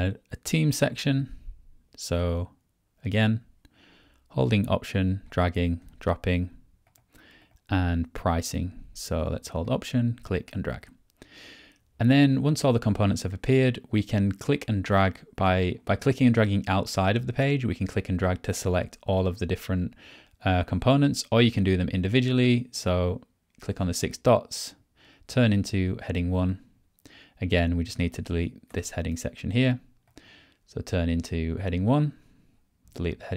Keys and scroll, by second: 28.7 BackSpace.